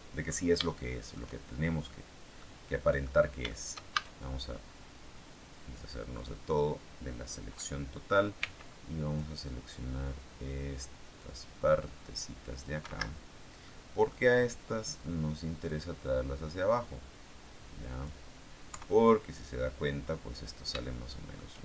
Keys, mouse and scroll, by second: 0.0-0.6 scroll up 3, 0.6 shift+middle click, 2.3 middle click, 3.4 shift+middle click, 3.8 shift+a, 6.1 click, 8.3 c, 9.1-12.7 drag, 12.7 Escape, 13.1-13.5 scroll down 1, 13.5 middle click, 16.0-18.1 drag, 18.6 KP_3, 19.9-20.4 scroll down 4, 20.7-21.6 shift+middle drag.